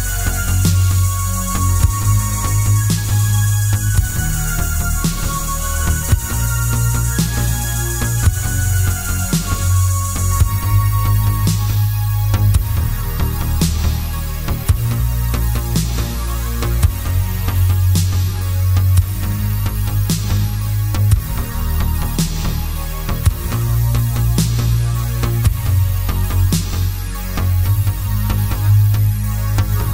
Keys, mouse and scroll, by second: 0.3 g, 1.1 click, 1.2 middle click, 2.0 click, 2.5 g, 3.0 click, 3.4-8.7 middle drag, 5.0 shift+d, 8.7 click, 9.1 g, 10.7 click, 11.0 KP_Decimal, 11.4 scroll down 1, 11.5-12.7 middle drag, 12.4 Tab, 12.7 click, 13.2 3, 13.5 click, 14.2 e, 15.1 click, 15.4 Tab, 16.4 shift+d, 17.6 click, 18.0 scroll down 1, 18.4-21.6 middle drag, 21.6 click, 22.3 g, 23.1 click, 23.6-28.0 middle drag, 24.3 scroll down 1, 26.0-26.3 scroll up 2, 26.6-27.1 scroll down 2, 28.0-29.0 shift+right drag, 29.0 shift+a, 29.6 s.